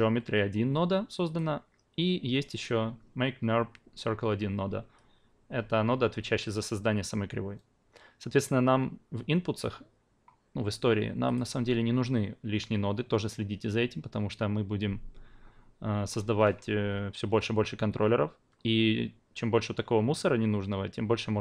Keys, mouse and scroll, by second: 1.2 click, 2.5 click, 8.4-11.3 drag.